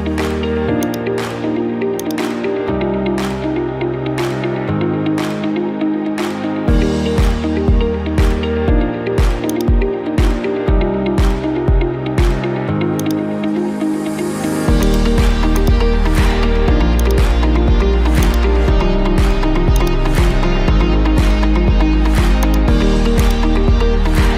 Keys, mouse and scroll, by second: 0.9-3.2 drag, 5.2-6.5 typing, 7.1 Return, 9.6 click, 10.4-11.4 middle drag, 12.7 middle click, 13.1 right click, 14.9 click, 15.5 click, 15.7 right click, 17.2-19.5 drag, 19.9-21.0 drag, 22.5 click, 23.2 click, 23.3 click.